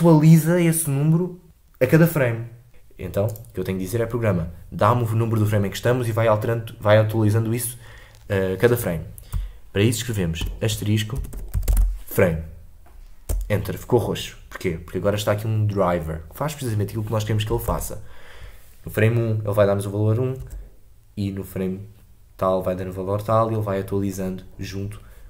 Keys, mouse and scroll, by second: 2.7 space, 17.7 shift+Left, 20.4 space.